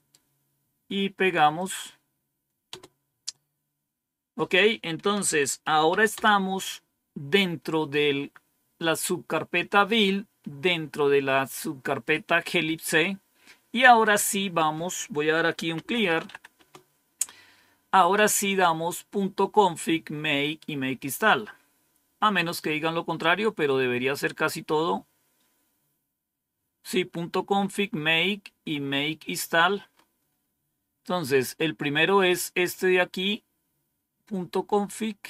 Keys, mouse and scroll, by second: 1.4 click, 2.6 Return, 4.9-6.2 typing, 7.4-8.1 typing, 15.1-16.6 typing, 20.5-21.1 scroll down 1, 21.7-22.4 scroll down 2, 22.5 scroll down 2, 24.6-25.2 scroll down 2, 25.2-25.7 scroll down 1, 27.0 scroll down 2, 29.8-31.5 scroll up 3, 32.9-35.2 drag.